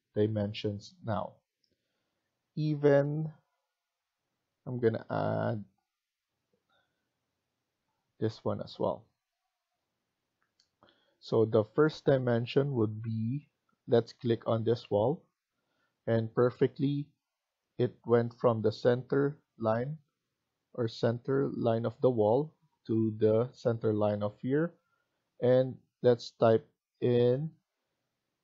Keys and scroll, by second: 0.0 Escape, 8.3 Escape, 8.6 Escape.